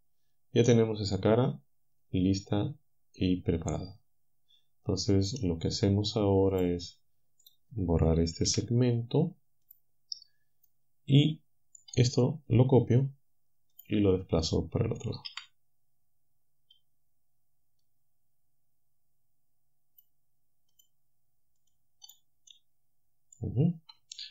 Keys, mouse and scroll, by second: 0.7-6.8 drag, 7.5 click, 8.5 Delete, 9.7 click, 10.7-12.9 drag, 13.8 click, 15.3 c, 18.0-20.2 drag, 20.8 click, 21.6 click, 22.5-23.5 drag.